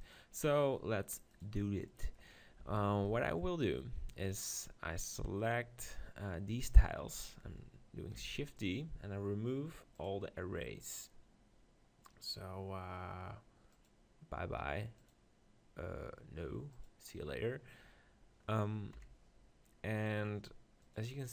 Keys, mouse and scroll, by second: 0.0-3.1 drag, 1.9 middle click, 2.6 z, 3.1-5.7 middle drag, 4.3-5.7 right drag, 8.2 shift+d, 8.7-18.9 drag, 18.9 KP_7, 20.8-21.3 middle drag.